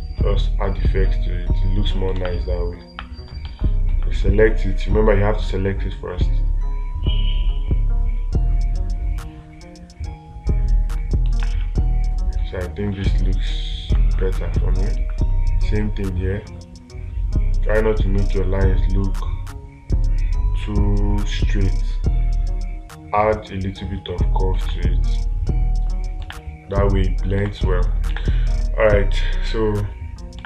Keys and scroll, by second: 2.6 space, 3.9 ctrl+z, 11.9 space, 25.1 space, 27.9 space.